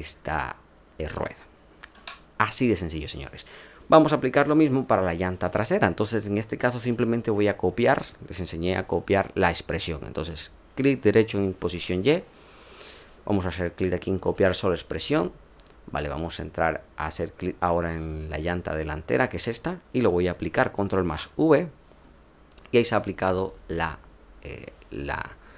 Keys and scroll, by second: 1.9 ctrl+z, 20.9 ctrl+v.